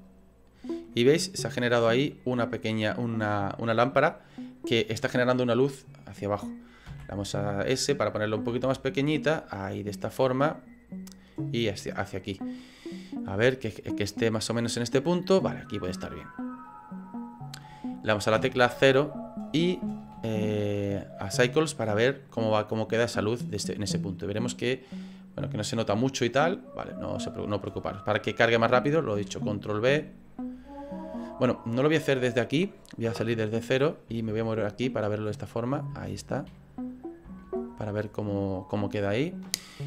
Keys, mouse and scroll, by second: 0.8 middle click, 10.4 middle click, 11.4 click, 13.3 middle click, 16.6 click, 18.3 KP_0, 21.3 click, 29.1 ctrl+b, 33.1 KP_0, 34.2 shift+middle click, 35.1 middle click, 36.0 shift+middle click, 36.5 middle click, 37.4 shift+middle click.